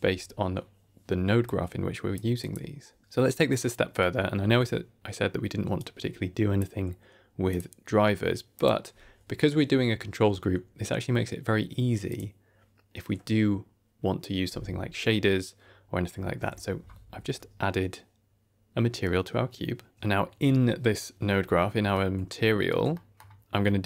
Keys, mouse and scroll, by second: 1.3 click, 2.3 click, 3.0-3.4 scroll down 2, 3.4 middle click, 3.7 click, 5.7 click, 7.4-8.7 drag, 12.0 click, 16.3 a, 16.4 KP_Decimal, 17.0 z, 19.9 click, 21.5 middle click, 22.0 scroll down 1, 22.2 ctrl+middle click, 22.8 middle click, 23.4 scroll up 1, 23.5 middle click.